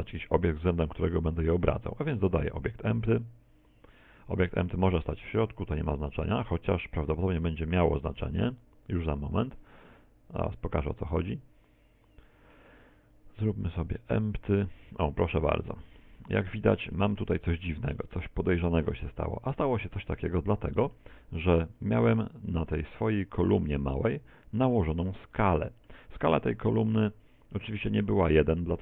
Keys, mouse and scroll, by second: 2.2 shift+a, 7.5 middle click, 10.5 right click, 11.9 click, 12.5 click, 13.1 click, 15.5-16.0 scroll down 3, 16.0 middle click, 16.0 scroll down 3, 17.2-18.0 scroll down 7, 18.0 middle click, 20.3 middle click, 21.2-21.9 scroll up 1, 21.9-24.1 scroll up 18, 24.1 middle click, 25.5 middle click.